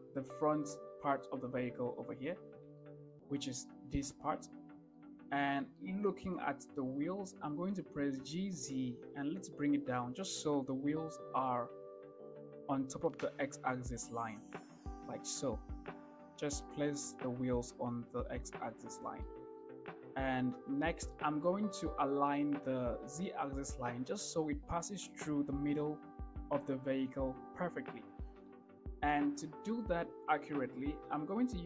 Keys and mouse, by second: 3.0-3.4 shift+middle drag, 5.2-5.6 shift+middle drag, 8.4 g, 9.0 z, 15.2-15.5 shift+middle drag, 19.6 shift+drag, 21.4 shift+click, 29.0-29.7 shift+middle drag.